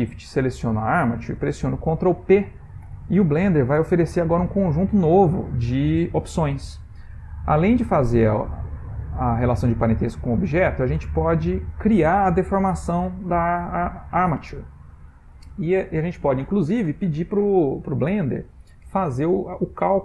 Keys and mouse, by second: 0.6 shift+click, 2.8 ctrl+p, 11.1 Down, 15.5 Down.